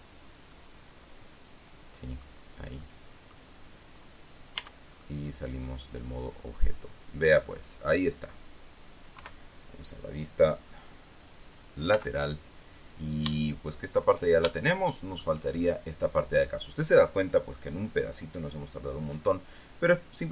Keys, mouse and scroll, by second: 0.4 z, 1.1-3.0 middle drag, 3.3 middle click, 4.7-5.5 scroll down 2, 5.1 Tab, 5.5-9.0 middle drag, 9.7 KP_3, 12.5 z, 13.8 shift+scroll down 1, 13.9 shift+middle click, 15.1-16.1 shift+middle drag.